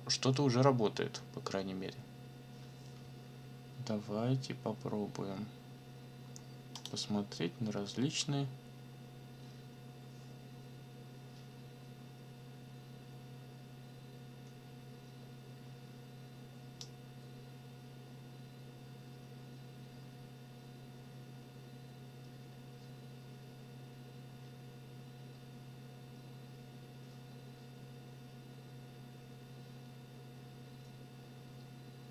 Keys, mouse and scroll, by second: 6.7 click, 11.5-12.2 scroll up 2, 16.8-32.1 drag.